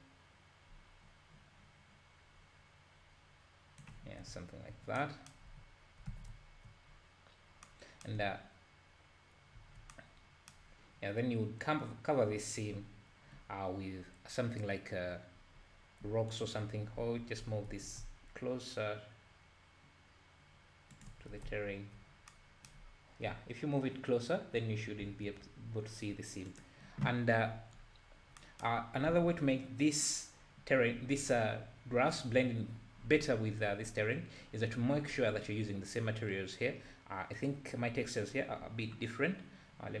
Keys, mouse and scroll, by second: 4.2 scroll down 1, 4.3 `, 5.6-6.0 scroll up 3, 6.1 alt+a, 6.9-7.3 scroll up 2, 7.3-7.7 scroll down 1, 8.2-9.1 scroll up 2, 9.6 `, 13.5 scroll down 2, 14.0-15.7 scroll up 2, 16.3 click, 16.7-17.1 scroll down 2, 17.4 g, 21.4 alt+a, 21.5 `, 22.9-23.2 scroll up 2, 26.5 click, 27.8-28.1 scroll up 1, 28.1-28.4 scroll down 2, 28.8 scroll up 1, 29.1 alt+a, 37.3 drag, 39.3-40.0 scroll down 2.